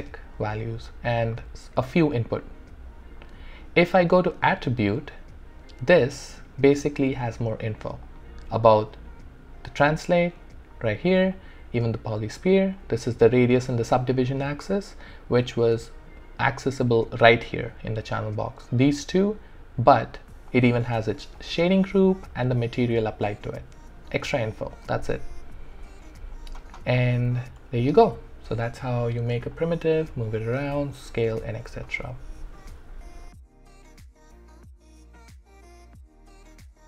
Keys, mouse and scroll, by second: 1.4 click, 4.5 click, 8.1 click, 11.1 typing, 11.3 click, 13.5 typing, 16.5 click, 18.7 click, 22.6 click, 22.6 typing, 25.8 click, 27.1 alt+right click, 27.8 alt+middle click.